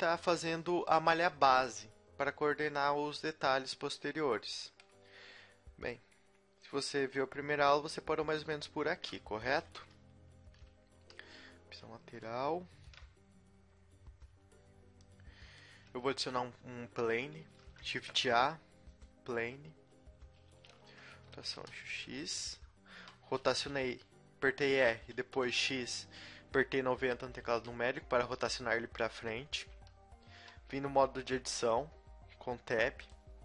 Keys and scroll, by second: 9.9 KP_3, 9.9 KP_6, 10.4 KP_3, 17.4 shift+a, 20.6 r, 20.8 r, 23.7 r, 24.4 r, 25.3 r, 29.7 Tab, 31.1 g.